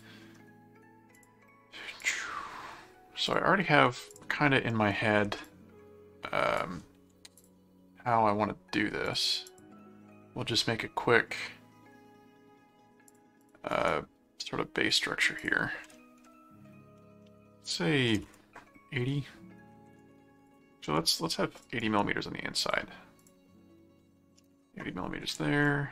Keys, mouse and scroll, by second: 1.1 click, 2.0 click, 3.2 click, 4.1 click, 4.7 right click, 5.5 click, 7.4 click, 9.1 click, 13.1 click, 13.7 right click, 14.9 click, 20.4 click, 21.6 click, 21.8 right click, 22.6 click, 25.6 click.